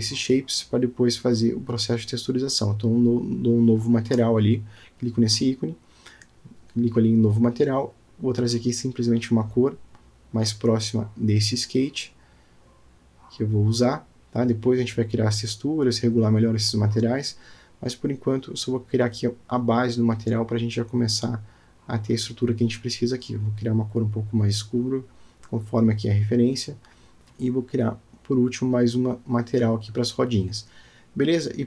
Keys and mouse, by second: 1.0-1.6 middle drag, 3.2 click, 4.4 click, 5.2-6.2 middle drag, 7.6 click, 8.6-9.8 drag, 20.2 click, 20.5-20.8 middle drag, 21.1 click, 22.6-27.2 drag.